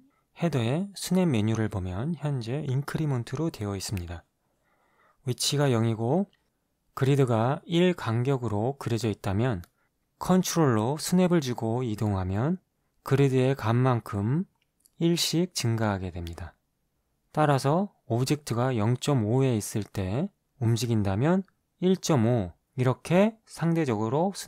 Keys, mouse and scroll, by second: 2.4 click, 10.9-16.9 ctrl+drag, 18.6 click, 19.4 KP_Decimal, 19.6 KP_5, 20.0 Return, 23.2-24.4 ctrl+drag.